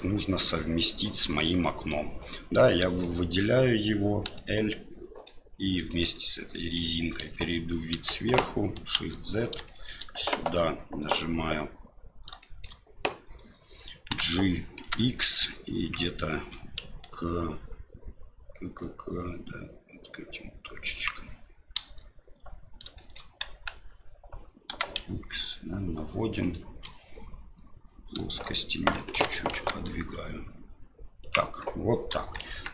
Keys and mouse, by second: 1.6 middle click, 3.0 middle click, 4.6 middle click, 5.7 l, 6.2 middle click, 7.2 KP_7, 8.9 shift+z, 9.7 shift+middle click, 10.2 KP_Divide, 12.5 shift+middle click, 14.1 g, 23.0 shift+middle click, 23.5 g, 29.1 g, 32.1 KP_1, 32.4 KP_3.